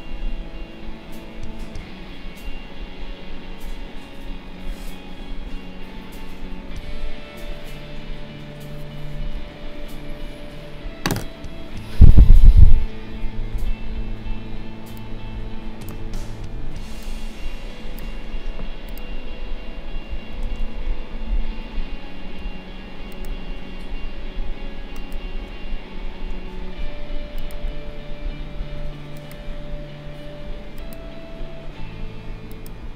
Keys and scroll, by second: 20.4 ctrl+a.